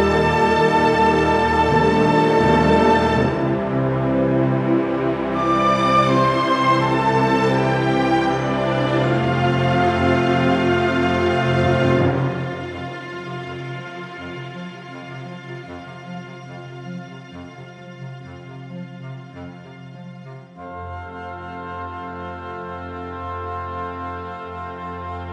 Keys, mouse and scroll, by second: 0.0 scroll up 2, 0.2 s, 0.5 click, 0.7 middle click, 1.1 click, 1.6 scroll down 2, 1.6 middle click, 1.8 shift+middle click, 1.9 scroll up 3, 2.0 middle click, 2.2 s, 2.6 click, 3.0 scroll down 1, 3.1 middle click, 3.4 alt+a, 3.6 middle click, 3.7 shift+middle click, 3.8-4.2 scroll up 4, 3.9 middle click, 4.2 scroll down 1, 4.3 shift+middle click, 4.7 click, 5.3 r, 10.4 click, 11.0 scroll down 2, 11.0 middle click, 11.4 KP_Decimal, 11.9 click, 12.3 x, 12.7 middle click, 12.7 scroll down 3, 12.8 scroll up 5, 13.1 click, 13.4 r, 14.3 click, 14.3 s, 15.3 scroll down 2, 15.4 alt+a, 15.7 click, 16.1 scroll down 4, 16.2 shift+middle click, 16.3 scroll up 3, 16.4 scroll down 1, 16.7 scroll down 3, 16.8 middle click, 17.1 ctrl+space, 17.2 scroll up 1, 17.3 shift+middle click, 17.4 middle click, 17.7 alt+a, 22.7 scroll down 6, 23.1 scroll up 6, 23.4 click, 23.9 middle click, 23.9 KP_Decimal, 24.2 click, 24.4 middle click, 24.6 shift+middle click, 24.7 scroll down 3, 24.9 middle click, 25.1 click.